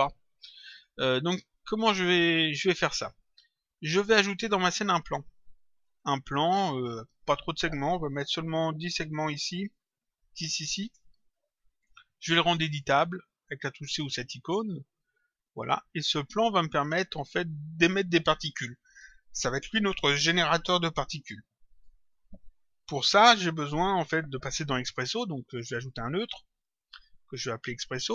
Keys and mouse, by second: 4.7 click, 7.1 click, 8.9 click, 10.0 click, 11.1 click, 14.5 click, 16.2 click, 17.8 click, 25.6 click.